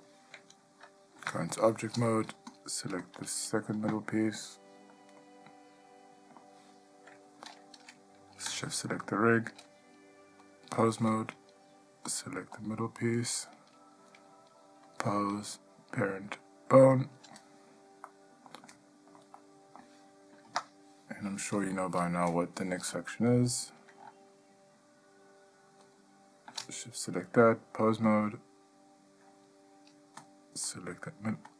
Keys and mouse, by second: 1.3 Tab, 2.7 click, 3.2 click, 5.4-6.7 ctrl+middle drag, 9.2 shift+click, 10.7-11.3 drag, 12.7 click, 15.1-17.2 drag, 18.3-18.7 middle drag, 18.9-19.5 shift+middle drag, 19.6-20.0 middle drag, 20.6 Tab, 26.1 shift+click, 27.7-28.3 drag, 30.9 click.